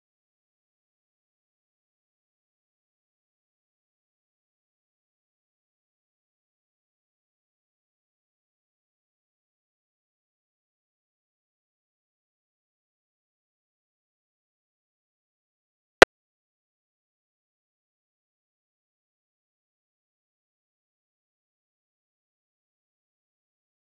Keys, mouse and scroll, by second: 0.2 scroll down 1, 0.4-0.7 scroll up 4, 0.5 shift+middle click, 0.7 shift+middle click, 0.8 click, 1.0 Tab, 1.1 click, 1.3-3.0 typing, 1.4 click, 1.5 Tab, 1.6 click, 2.0 click, 2.4 middle click, 2.8 click, 4.0 click, 4.3 click, 4.9 click, 6.3 click, 6.9 middle click, 7.4 shift+d, 7.7-8.4 drag, 8.8-9.8 drag, 9.8 middle click, 10.3 click, 10.3 0, 10.5 scroll down 6, 10.6 middle click, 11.3 click, 11.6 middle click, 11.7 0, 11.9-12.5 scroll down 3, 12.0 click, 12.5 click, 12.7 0, 13.1-13.5 shift+middle drag, 13.5 click, 13.9 0, 14.1 scroll up 6, 14.2 middle drag, 14.4 click, 14.8 shift+d, 15.4 shift+d, 15.7 middle click, 16.0-17.3 drag, 17.4 click, 17.9 shift+a, 18.9 click, 20.4-21.9 drag, 21.9 middle click, 22.2 click, 22.7 middle click, 23.3 click.